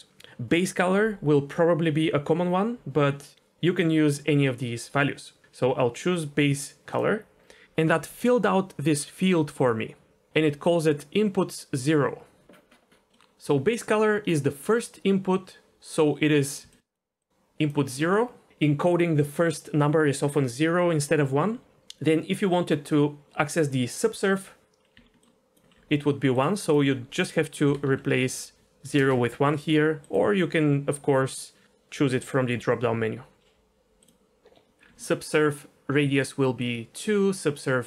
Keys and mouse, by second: 13.1 middle click, 16.6-17.9 d, 16.7 click, 17.2-17.7 drag, 24.9-25.6 d, 25.2 click, 26.4-29.0 drag, 26.4 d, 30.0-34.1 drag, 34.8 ctrl+z, 34.8-37.8 typing, 35.1-36.2 drag, 36.6 click, 37.5-37.8 drag.